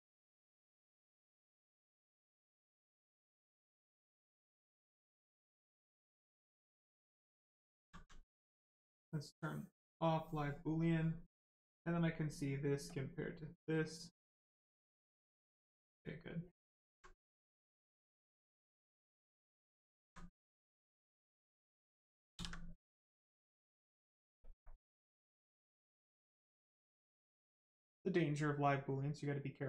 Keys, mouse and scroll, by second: 1.7 click, 2.3 right click, 3.9 click, 5.9 right click, 6.1 shift+right click, 6.5 alt+right click, 7.4 ctrl+right click, 7.5 ctrl+click, 7.9 alt+right click, 9.8 click, 11.7 click, 16.3 click, 16.8 alt+right click, 17.5 right click, 17.5 right click, 19.1 click, 19.7 right click, 20.0 alt+right click, 20.6 right click, 23.5 click, 29.0 right click.